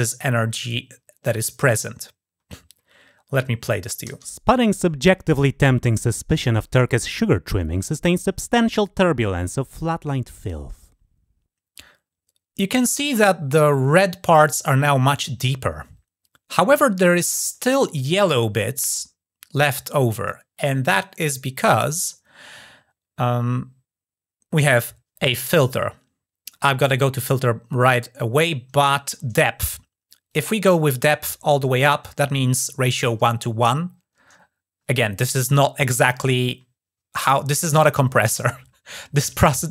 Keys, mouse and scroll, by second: 30.1-30.5 drag, 31.5 click, 31.7-35.4 drag.